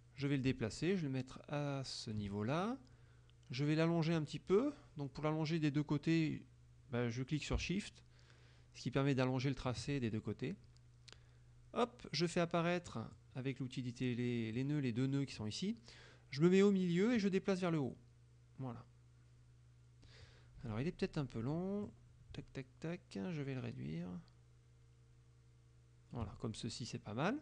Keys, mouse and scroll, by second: 0.3-2.4 ctrl+drag, 4.2-9.9 drag, 13.0 click, 14.6 click, 17.3-20.3 drag, 20.7 F1, 21.9-26.4 drag, 26.6 shift+middle click.